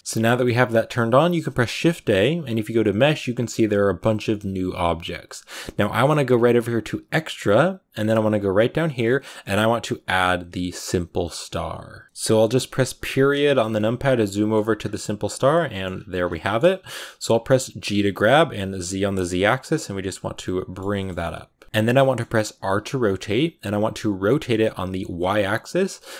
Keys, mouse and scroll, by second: 0.0 scroll up 1, 0.2-11.6 shift+middle drag, 12.0 middle click, 12.8 KP_Decimal, 13.6-14.7 middle drag, 14.7-15.1 scroll down 2, 15.1 middle click, 15.7-16.3 scroll down 8, 16.3 shift+middle click, 16.9-17.5 scroll up 1, 17.5 g, 20.2 scroll down 1, 20.3-22.3 middle drag, 21.8 scroll down 1, 22.3 r.